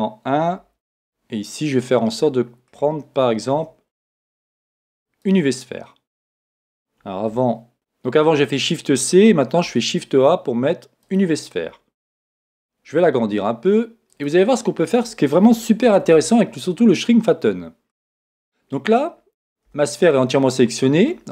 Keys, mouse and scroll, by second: 1.0-4.6 middle drag, 3.5 shift+a, 4.7 middle click, 7.3 super+z, 7.7 shift+c, 9.6 shift+a, 10.2 shift+a, 12.3 s, 14.6-15.5 scroll up 1, 15.5-16.6 scroll up 1, 15.9 Tab, 17.0-20.4 middle drag, 19.7 a, 21.1-21.3 middle drag.